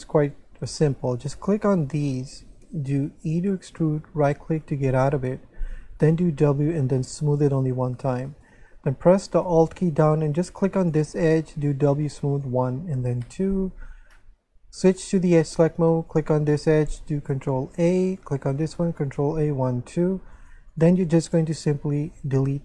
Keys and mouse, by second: 1.0 right click, 1.4 shift+right click, 3.3 e, 4.2 right click, 6.1 w, 7.0 click, 10.8 alt+right click, 12.3 click, 12.9 w, 13.1 click, 14.8 click, 16.1 right click, 17.4 ctrl+a, 18.2 right click, 19.0 ctrl+a, 20.3 right click, 20.7 shift+right click, 22.1 x.